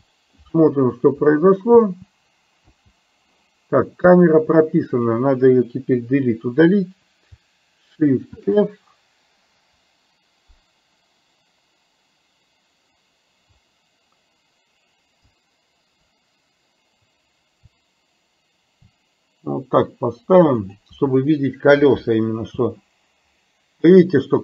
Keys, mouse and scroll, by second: 1.8 space, 4.7 click, 4.7 space, 6.1 Delete, 8.4 shift+f, 22.7 space.